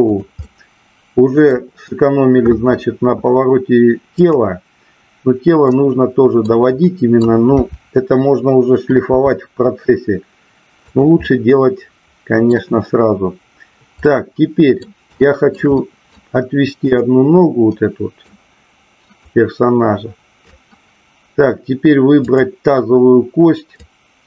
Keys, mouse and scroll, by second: 0.4-1.5 middle drag, 4.0-5.1 drag, 5.6-6.4 middle drag, 6.8-7.3 middle drag, 7.5 KP_7, 9.0 r, 10.9 click, 11.1-12.5 middle drag, 14.0 middle click, 15.1 shift+middle click, 15.7 middle click, 16.9 click, 17.6 middle click, 19.3-20.5 drag, 23.9-24.2 drag.